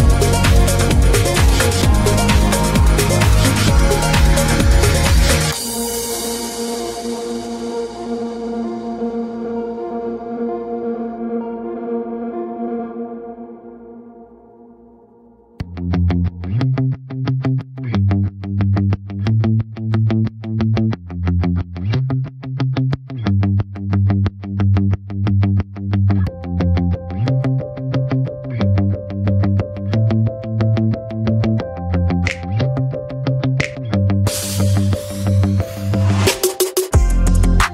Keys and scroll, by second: 21.8 d.